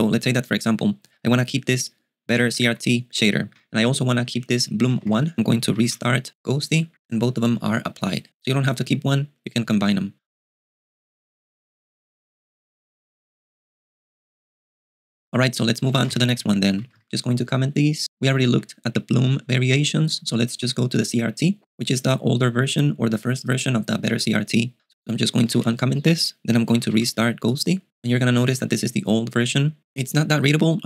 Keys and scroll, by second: 2.0-5.5 typing, 6.1 super+q, 15.6-17.5 typing, 18.5-20.7 typing, 25.1-26.1 typing, 27.1 super+q.